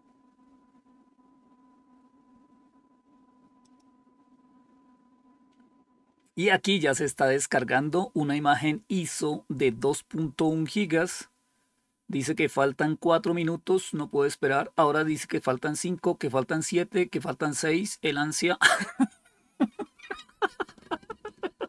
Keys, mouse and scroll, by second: 3.5 click.